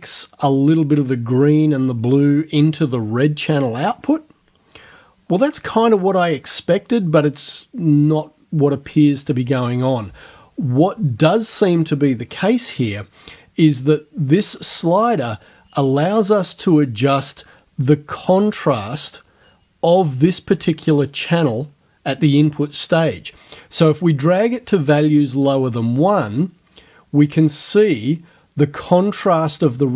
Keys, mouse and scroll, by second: 26.0-29.9 drag.